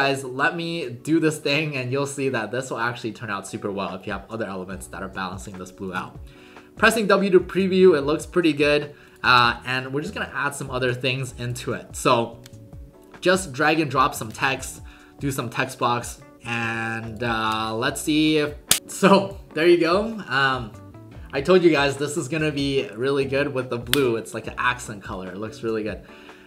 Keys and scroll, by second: 6.0 w, 8.4 w.